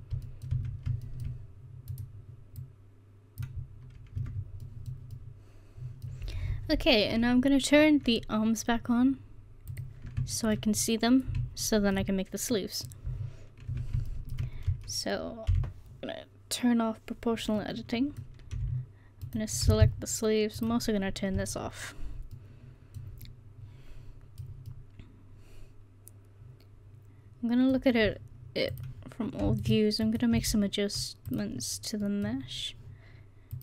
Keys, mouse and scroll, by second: 0.6 Tab, 2.0 right click, 2.7 middle click, 4.1 click, 4.2 Tab, 4.2 drag, 8.5-9.4 middle drag, 9.8-10.4 drag, 10.4-11.6 middle drag, 13.8 Tab, 15.6 o, 22.5 middle click, 32.1-33.6 drag.